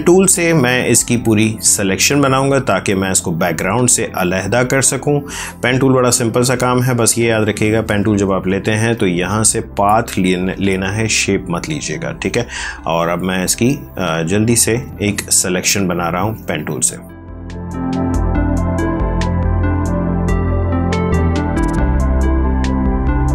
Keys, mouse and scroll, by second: 6.3 click, 8.9 click, 11.9 click, 12.9 ctrl+space, 13.3 ctrl+click, 14.9 click, 17.5 ctrl+z, 17.6 click, 18.2 click, 18.7 ctrl+z, 18.8 click, 19.3 space, 19.4 click, 20.3 space, 20.5 click, 20.9 space, 21.1 click, 21.4 click, 21.6 space, 22.6 ctrl+z, 22.8 click, 22.9 space, 23.2 click.